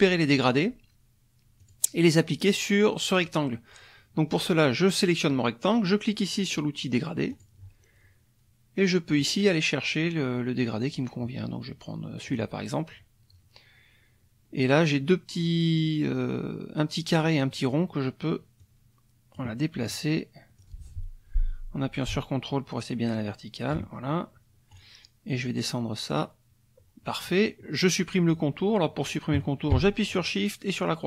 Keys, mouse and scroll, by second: 1.6 click, 7.3 click, 9.1 click, 12.3 click, 18.6 click, 20.6-23.9 drag, 24.7 click, 26.1 click.